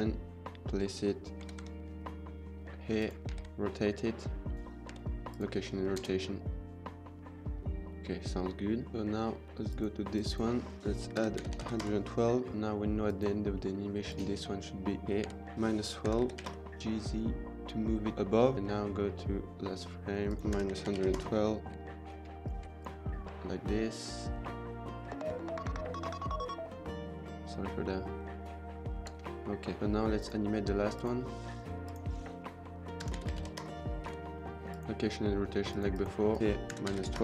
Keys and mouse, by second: 0.0-0.5 middle drag, 1.4 g, 1.6 y, 3.2 r, 3.2 z, 4.8 k, 5.7 space, 8.8 click, 9.4 click, 10.0 click, 10.8-11.8 drag, 11.5 KP_1, 12.9 click, 13.4 drag, 13.5 middle click, 14.0 click, 15.5 click, 16.8 g, 16.8 z, 18.5 ctrl+s, 20.2 click, 20.7-23.1 typing, 22.9 middle click, 29.0 space, 29.8 ctrl+s, 30.1 click, 30.9-33.5 drag, 33.2 KP_1, 34.8 k, 35.5 click, 35.9 click, 36.3 click, 36.4 click.